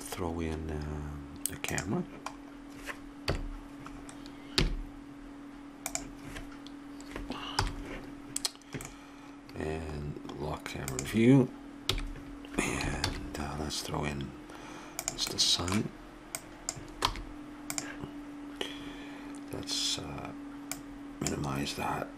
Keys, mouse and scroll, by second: 2.3-3.3 middle drag, 3.2 KP_7, 4.6 g, 7.6 n, 8.9-10.8 middle drag, 11.9 n, 13.1 shift+a, 16.4-18.7 drag, 17.1 r, 20.7-22.1 drag.